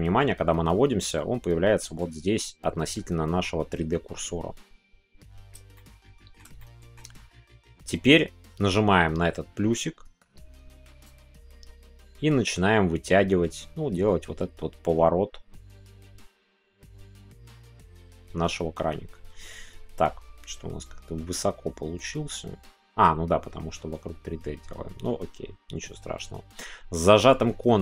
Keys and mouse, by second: 5.7 shift+middle click, 6.6-27.8 middle drag.